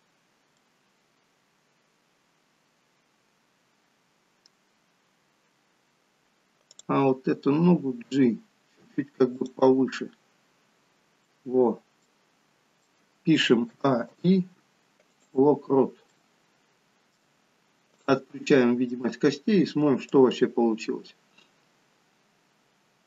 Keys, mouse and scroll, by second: 0.6 middle click, 5.3-6.4 scroll up 2, 6.7 click, 6.7 scroll up 1, 8.1 g, 9.9 middle click, 11.6-13.0 scroll down 3, 12.0 middle click, 13.8 a, 14.2 i, 15.9 scroll down 2, 16.2 middle click, 18.2 click, 18.4 middle click, 20.2 click.